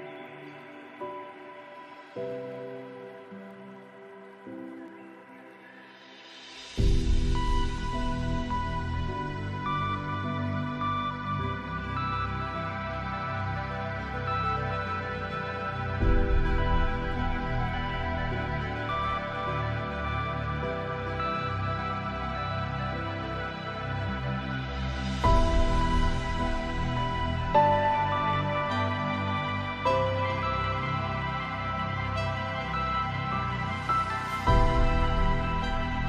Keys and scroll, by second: 28.3 ctrl+space.